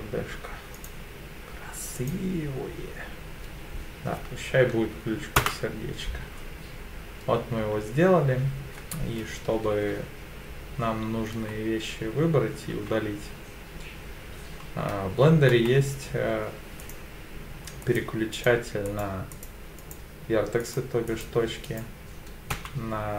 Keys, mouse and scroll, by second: 9.7 3, 11.3 1, 12.7 3, 15.5 1, 16.8 click, 17.8 click, 18.3 click, 18.8 click, 19.3 click, 19.8 click, 20.6 click, 21.1 click, 21.6 click, 22.5 2.